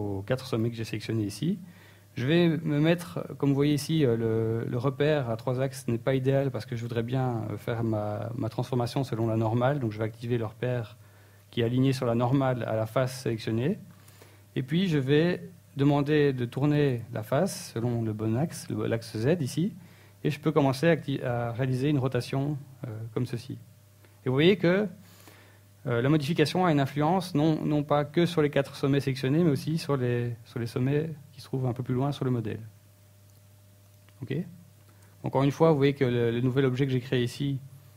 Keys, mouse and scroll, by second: 1.2 middle click, 5.5 click, 9.0 middle click, 9.7 shift+middle click, 10.4 middle click, 10.9-11.7 scroll up 2, 12.3 scroll down 3, 12.9 r, 15.2 r, 32.3 click, 32.3 Tab, 36.8 shift+space, 37.3 shift+space, 37.5 t.